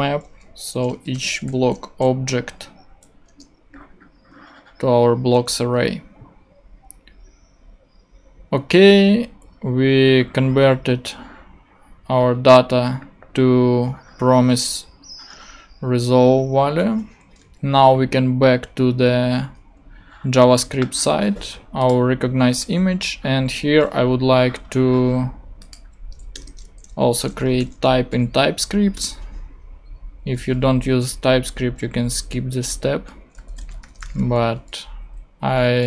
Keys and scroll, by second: 0.8-1.9 typing, 2.9 Down, 3.2 Return, 17.9 super+Tab, 26.3 Return, 27.0-28.9 typing, 31.0 super+Left, 33.1-34.5 typing, 34.9 super+Right.